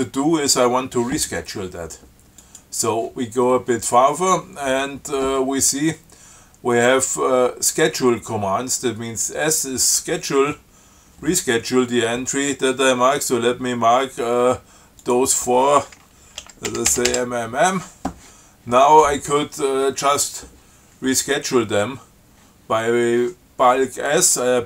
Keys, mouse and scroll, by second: 2.7 click, 15.3 click, 16.7 m.